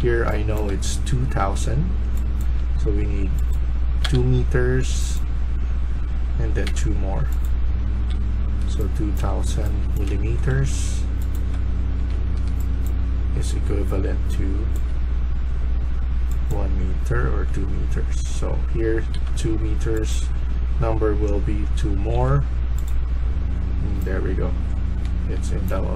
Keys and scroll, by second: 0.0-1.1 typing, 3.9 2, 7.6-8.0 typing, 11.6-12.3 typing, 19.0 2, 23.5-23.8 typing, 25.7-25.9 typing.